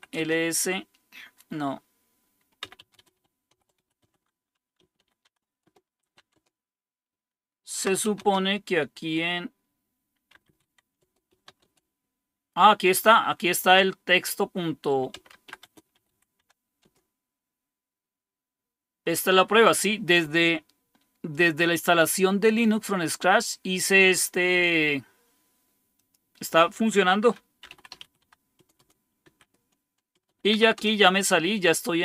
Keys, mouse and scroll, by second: 0.0-0.4 typing, 2.5-8.8 typing, 10.0-11.9 typing, 14.8-16.8 typing, 16.8 Return, 21.3-23.4 drag, 25.9 click, 27.3-31.5 typing.